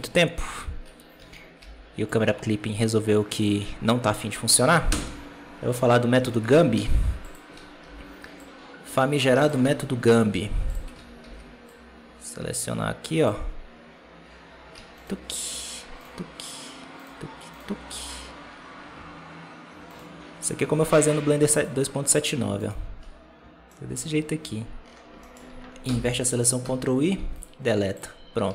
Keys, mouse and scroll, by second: 0.0 Tab, 0.7 1, 1.1 alt+a, 3.2 b, 4.8 ctrl+i, 6.4 alt+a, 7.2 z, 7.4 alt+a, 9.2 b, 10.0 z, 10.6 z, 10.8 alt+a, 13.1 b, 14.9-18.5 shift+right drag, 18.5-19.4 scroll up 3, 19.8-23.6 shift+right drag, 23.6 shift+middle click, 23.9 scroll up 1, 24.7-25.1 scroll down 1, 25.1 shift+middle click, 25.7 ctrl+i, 28.0 x.